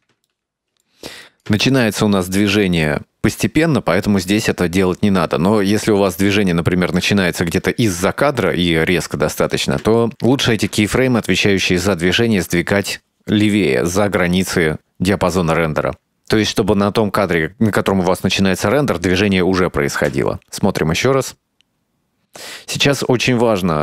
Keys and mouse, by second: 0.3 middle click, 1.4 click, 1.8-3.0 ctrl+middle drag, 3.4 click, 6.4 ctrl+middle click, 7.3 shift+middle click, 8.5 right click, 9.0 g, 10.2 middle click, 11.0 shift+middle click, 12.0 ctrl+middle click, 15.3-18.8 drag, 20.2 space.